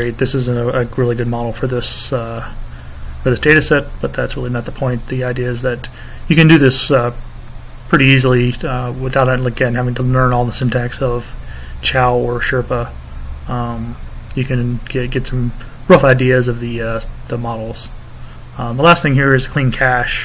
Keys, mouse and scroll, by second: 3.0 click, 10.1 click, 13.9 click, 14.7 click, 17.9 click, 19.7 click.